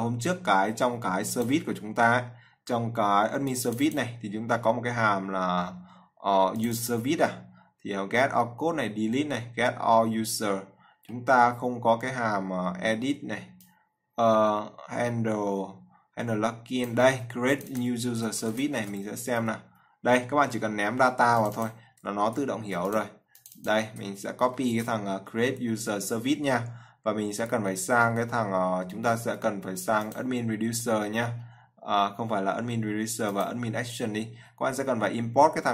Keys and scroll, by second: 18.7 ctrl+c, 19.1 ctrl+f, 24.9 ctrl+c.